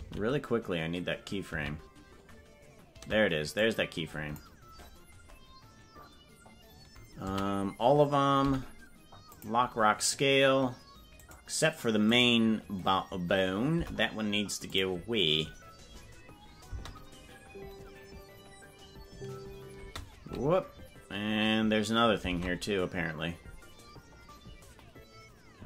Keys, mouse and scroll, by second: 1.0 ctrl+z, 3.6 click, 7.3 a, 13.7 Delete, 16.6 space, 22.3 ctrl+Tab.